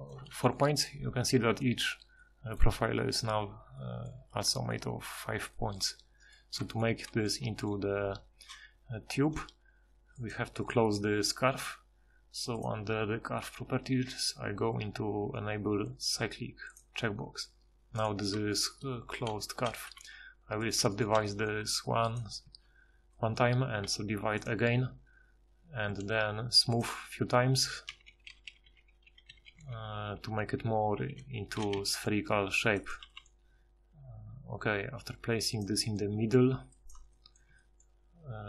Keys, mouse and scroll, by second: 7.4 g, 19.9 w, 21.2 g, 22.3 a, 22.5 a, 23.8 w, 25.9-31.7 typing, 33.0 g, 36.1 s, 37.5 s.